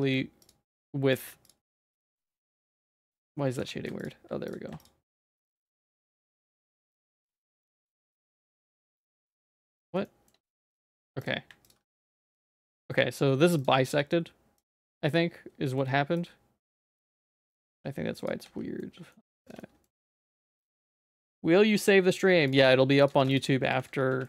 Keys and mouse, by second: 1.4 alt+click, 1.8 middle click, 2.0 z, 2.4-3.4 middle drag, 3.6 3, 4.0 alt+click, 5.8 click, 6.9 click, 7.6 middle click, 8.0 shift+middle click, 8.7 z, 9.0 middle click, 9.2 z, 9.5 middle click, 10.0 shift+middle click, 10.6 click, 11.7 click, 12.2 z, 12.6 middle click, 14.6 click, 15.8 shift+middle click, 16.2-17.3 drag, 17.7 x, 18.4 z, 18.8 middle click, 19.2 Tab, 19.6 middle click, 20.0 ctrl+s, 20.1-21.8 middle drag, 22.5 click, 22.6 right click, 23.8 ctrl+s.